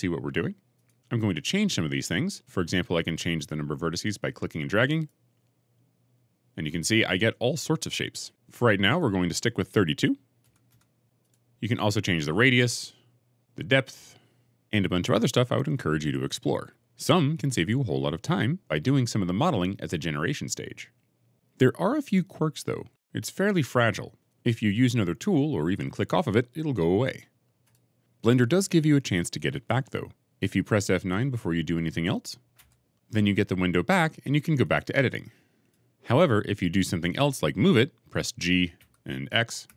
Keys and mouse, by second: 0.7 click, 1.7-2.7 drag, 4.9-8.3 drag, 8.7-11.2 drag, 12.1-13.4 drag, 13.8 click, 32.4 F9, 38.7 g, 39.5 x.